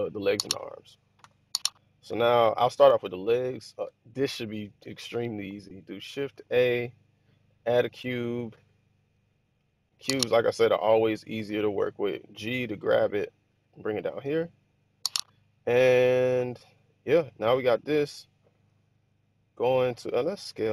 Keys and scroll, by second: 1.2 h, 6.3 shift+a, 11.3 g.